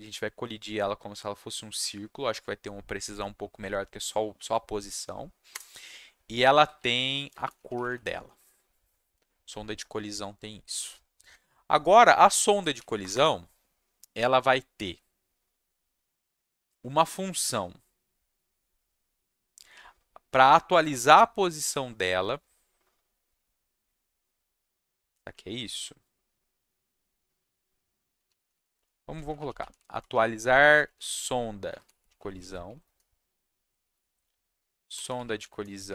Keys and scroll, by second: 5.5 Return, 6.5-8.3 typing, 12.5 Down, 13.0 Return, 13.1 Return, 28.0-35.9 typing.